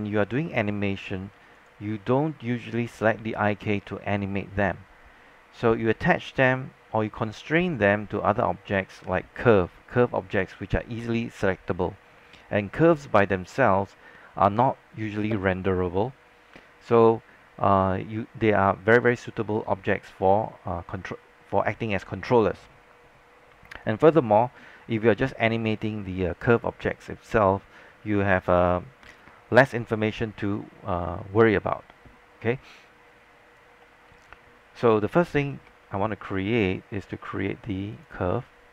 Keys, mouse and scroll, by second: 1.6 click, 31.7-32.0 scroll up 1, 32.7 alt+click, 34.0 alt+middle click, 35.5 alt+space, 35.6-38.7 drag.